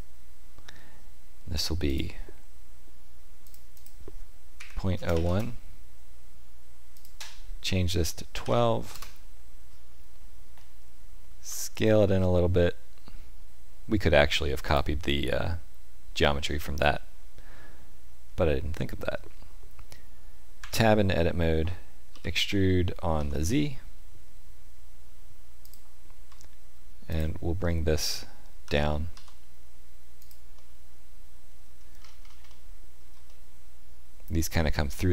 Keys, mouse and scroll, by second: 1.8 click, 3.7 click, 11.4 s, 16.9 middle click, 20.5 Tab, 22.0 e, 27.0 alt+click, 28.6 g, 30.5 middle click, 31.9-32.3 scroll up 3, 32.4 shift+middle click, 33.2 middle click.